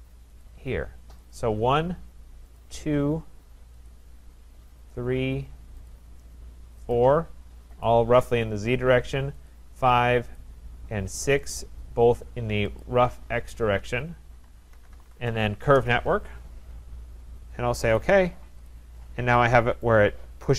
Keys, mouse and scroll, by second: 0.5 click, 1.4 click, 2.6 shift+click, 3.2 shift+click, 3.9 click, 4.9 click, 5.9 shift+click, 6.9 shift+click, 7.8 shift+click, 9.5 shift+click, 10.4 shift+click, 11.6 shift+click, 12.8 shift+click, 14.5-15.7 typing, 18.0 click, 18.7 click, 19.0-19.8 scroll, 19.9 right click, 20.2 Return, 20.2-20.5 scroll.